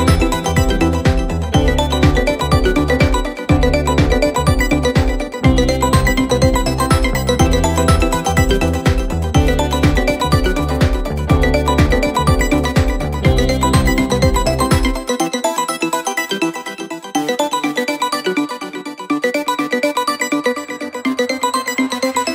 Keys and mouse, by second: 3.3 middle click, 5.7 middle click, 6.5 middle click, 6.8 middle click, 8.0 middle click, 8.8 middle click, 10.6 middle click, 11.8 middle click, 12.9 middle click, 13.8 middle click, 14.4 middle click, 19.0 middle click.